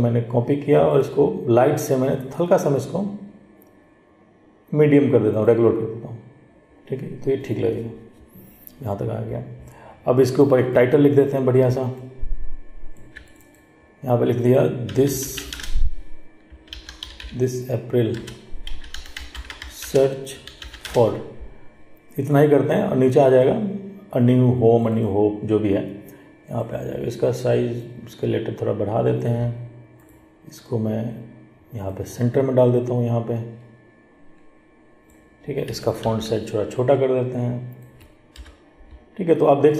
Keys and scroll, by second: 36.2 ctrl+t.